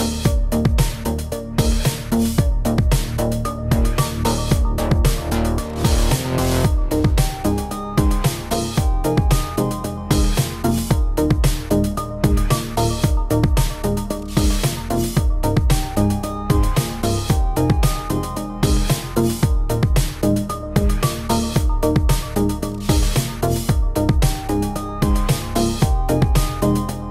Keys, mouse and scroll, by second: 0.0-3.3 typing, 0.1 middle click, 0.3 click, 0.5 click, 0.8 click, 1.3 click, 1.6 scroll down 2, 1.6 middle click, 2.0 click, 2.1 middle click, 2.4 middle click, 2.7 middle click, 3.0 shift+middle click, 3.0 middle click, 3.2 scroll up 1, 3.2 shift+middle click, 3.5 middle click, 4.7 middle click, 4.7-6.8 typing, 5.3 middle click, 5.4 shift+middle click, 5.7 click, 5.8 middle click, 6.3 middle click, 6.7 middle click, 7.0 middle click, 7.3 middle click, 7.4 shift+middle click, 7.5 shift+middle click, 7.6 click, 7.7 middle click, 7.8 g, 8.2 middle click, 8.6 scroll down 2, 8.7 middle click, 8.8 shift+middle click, 8.9 middle click, 9.1 click, 9.4 click, 9.8 click, 9.9 shift+middle click, 10.1 click, 10.3 click, 10.5 click, 10.7 click, 10.8 click, 11.2 click, 11.5 click, 11.6 click, 12.2 Tab, 12.4 click, 15.1 click, 16.3 click, 16.9 click, 17.5 click, 18.0 click, 18.1 click, 18.3 click, 19.2 click, 19.4-20.4 click, 20.0 click, 21.0 click, 21.0 scroll down 1, 21.3 ctrl+s, 21.8 click, 22.0 middle click, 22.2 shift+middle click, 22.7 shift+click, 23.0 click, 23.2 Tab, 23.4 click, 23.5 s, 23.8 scroll down 2, 24.1 click, 24.3 s, 24.6 click, 24.7 d, 24.8 s, 25.3 scroll up 1, 25.3 shift+middle click, 26.1 click, 26.8 click, 26.9 g.